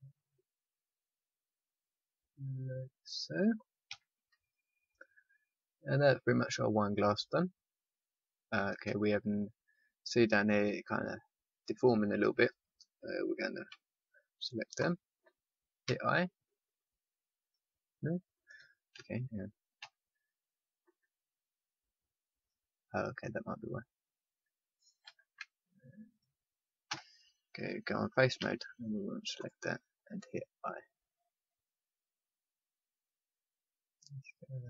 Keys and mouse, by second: 3.8 a, 4.2 Tab, 8.4 Tab, 10.6 Tab, 12.3 Tab, 13.6 c, 14.8-16.7 drag, 15.8 i, 18.5 ctrl+z, 19.0 click, 19.7 z, 25.0 ctrl+z, 26.0-28.2 drag, 26.8 z, 28.3 c, 29.4 right click, 30.5 i.